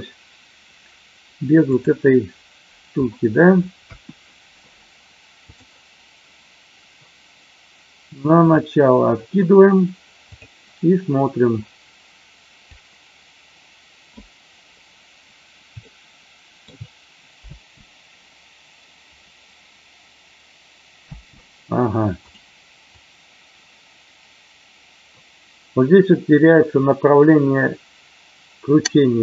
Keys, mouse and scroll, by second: 5.4 click, 8.5 click, 10.2 click, 13.0-14.1 drag, 15.7-16.6 shift+middle drag, 17.3 space, 21.1 space, 22.1 click, 22.8-29.2 drag.